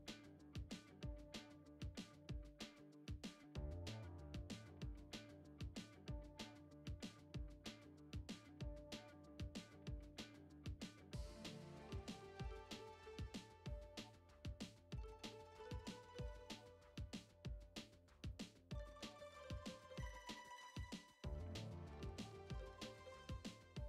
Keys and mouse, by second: 1.3 middle click, 2.4 KP_5, 3.0 middle click, 4.3 shift+middle click, 4.8-6.9 middle drag, 7.4 shift+a, 10.5 ctrl+alt+KP_0, 11.9 click, 12.8-13.6 drag, 14.1-16.2 drag, 16.7 g, 18.5-20.5 drag, 21.0 g.